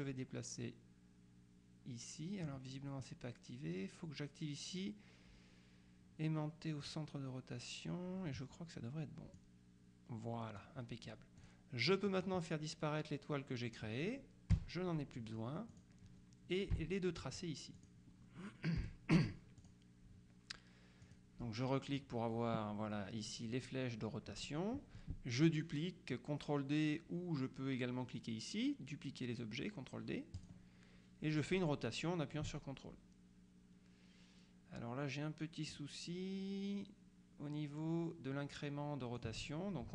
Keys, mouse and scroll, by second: 6.9 click, 9.4-11.2 drag, 11.5 click, 12.2 click, 14.6 Delete, 15.8 click, 16.8 Delete, 17.8 click, 18.9 Delete, 19.7 click, 21.1 click, 30.5 click, 31.5-39.8 drag.